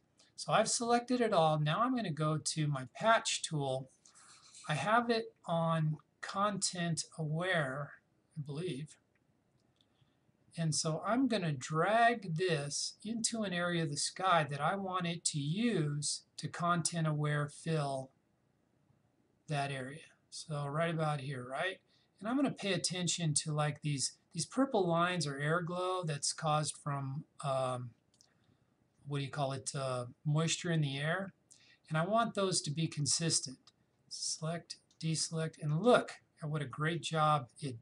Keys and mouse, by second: 17.5-27.6 drag, 34.3 click.